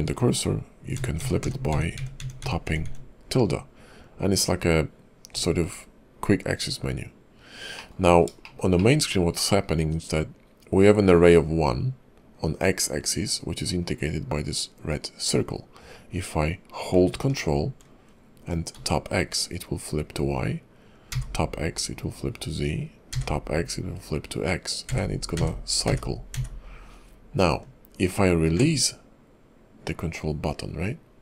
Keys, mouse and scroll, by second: 7.3-7.8 scroll down 2, 7.8 middle click, 8.1 scroll up 2, 8.4 shift+middle click, 8.8 middle click, 9.3-9.6 scroll up 1, 9.6 scroll down 1, 15.3-16.9 scroll down 1, 16.9 scroll down 1, 30.5-31.2 scroll down 5.